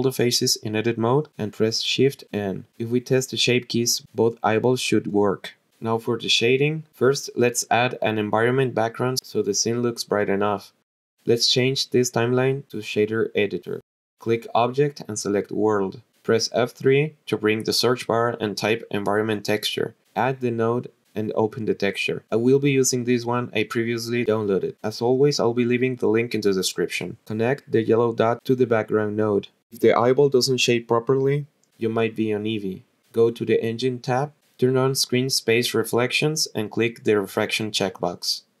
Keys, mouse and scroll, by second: 0.9 a, 2.2 shift+n, 2.8 click, 3.6-6.2 drag, 6.9-8.3 drag, 9.3-13.2 drag, 14.3-15.7 drag, 16.3 click, 17.8 F3, 21.4-23.1 drag, 25.4-26.3 drag, 32.8 click, 33.2 click, 34.1 click, 35.3 click, 36.7 click.